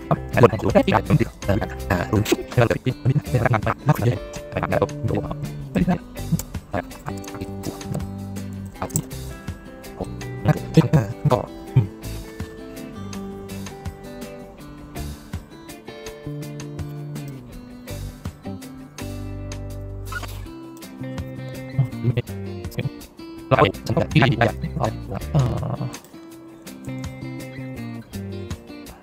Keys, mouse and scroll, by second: 0.5 middle click, 0.9 click, 1.2 click, 2.1 click, 2.7 click, 3.3 click, 4.0 click, 4.3 middle click, 5.3 click, 6.1 middle click, 9.2 click, 10.9 middle click, 11.1 middle click, 15.1 middle click, 15.7 middle click, 16.1 middle click, 16.4 middle click, 16.7 middle click, 17.2 click, 17.5 middle click, 18.6 click, 19.3 middle click, 19.5 middle click, 20.4 middle click, 21.1 middle click, 21.4 middle click, 21.6 middle click, 23.4 click, 24.5 click, 25.2 click, 25.9 click.